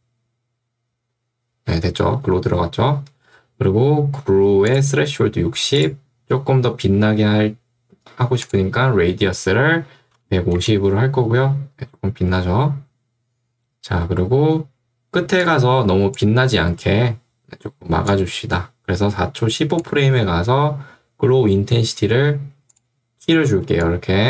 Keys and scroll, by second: 9.8-10.9 typing, 23.6 ctrl+2.